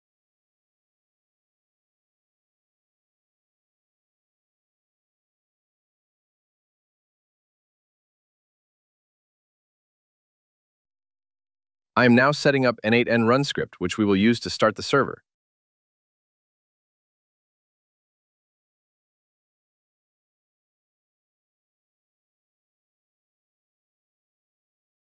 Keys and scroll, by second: 11.4 shift+~, 12.6 BackSpace, 21.5 super+v, 22.8 super+v, 23.7 ctrl+x.